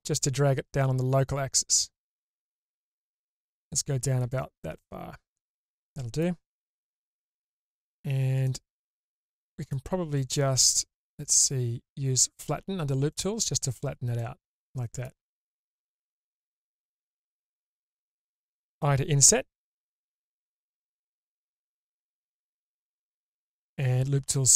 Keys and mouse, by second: 4.6-6.2 middle drag, 8.4 click, 9.6 click, 14.2-15.0 middle drag, 17.6 middle click, 24.4 click.